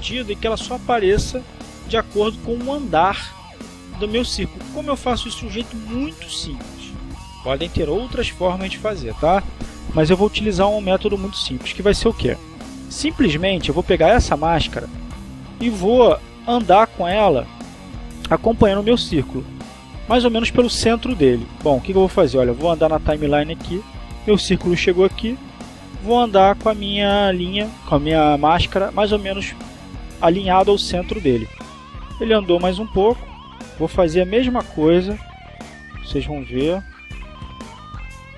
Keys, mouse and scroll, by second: 12.8 click, 14.4 click, 15.9-17.3 drag, 20.4 click, 22.7-25.2 drag, 25.9-30.8 drag, 32.1-33.3 drag, 33.9-35.5 drag, 36.0-37.4 drag, 37.9-38.3 drag.